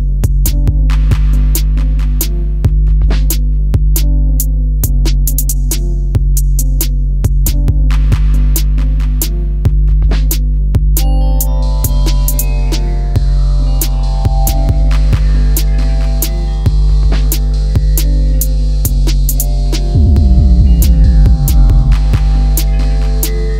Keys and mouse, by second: 3.4-4.6 right drag, 5.4 s, 6.3-7.5 right drag, 7.8 click, 8.9 s, 11.2 click, 13.3 KP_1, 14.6 s, 14.9 x, 18.3 click, 19.8 middle click, 21.7-22.9 middle drag, 23.3 ctrl+z.